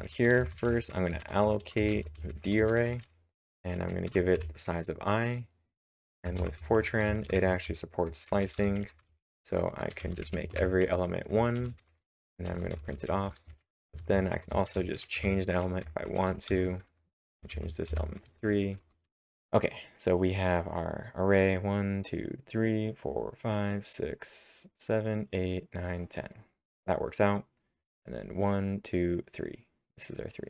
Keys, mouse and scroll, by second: 0.0-1.2 typing, 2.7 shift+(, 4.1 i, 5.6-15.1 typing, 16.2-19.7 typing.